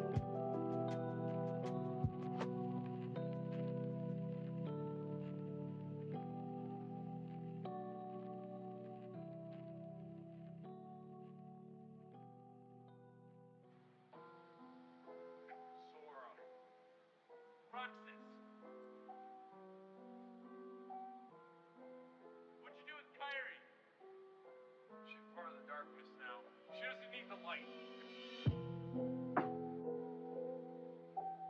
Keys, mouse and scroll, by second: 0.4 click, 2.9-3.8 drag, 4.7 click, 6.6 e, 12.9 ctrl+z, 14.1 e, 16.9 z, 17.1 z, 17.5-18.2 scroll down 3, 20.1 KP_3, 21.9-22.9 drag, 24.7-26.0 shift+middle drag, 27.4 click, 28.7 e.